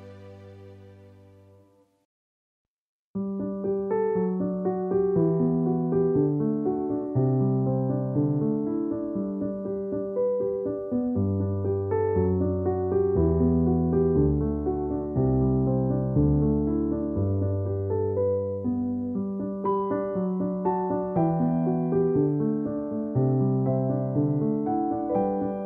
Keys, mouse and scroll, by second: 1.5 space, 1.7 click, 1.8 space, 5.7 ], 8.8 ], 11.2-14.0 typing, 11.4 click, 21.9-25.6 typing.